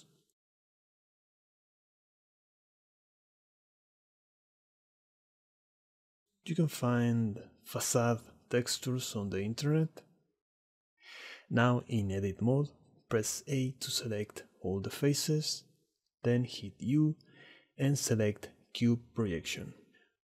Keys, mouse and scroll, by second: 0.0 click, 1.3 click, 2.5 middle click, 4.3 ctrl+t, 5.1 ctrl+t, 11.2 click, 12.4 middle drag, 12.9 drag, 13.1 Tab, 13.7 shift+click, 14.3 a, 15.9 u, 19.3 click.